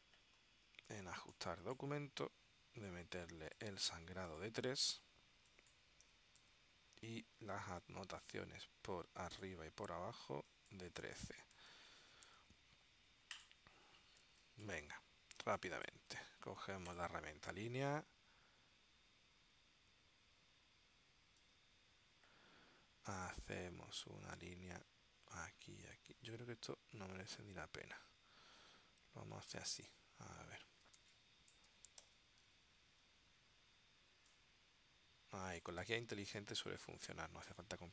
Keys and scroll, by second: 6.2 3, 6.6 Tab, 10.8-12.3 typing, 12.5 Tab, 14.4 space, 15.5 space, 31.1 space, 32.2 v, 36.0 space.